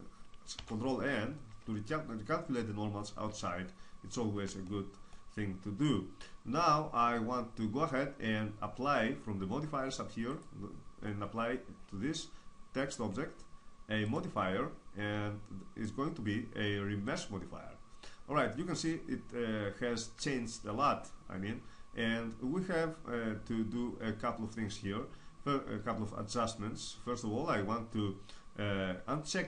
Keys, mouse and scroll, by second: 0.7 ctrl+n, 3.2 Tab, 4.6-6.6 drag, 10.2-17.2 drag.